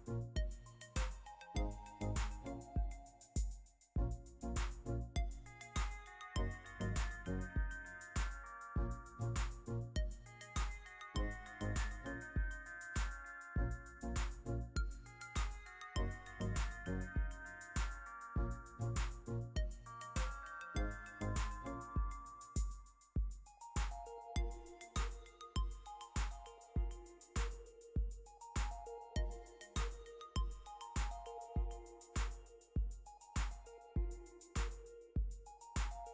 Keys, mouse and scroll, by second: 1.3-2.3 typing, 2.6 Return, 18.5-18.8 typing, 22.3 typing, 32.6-33.0 typing.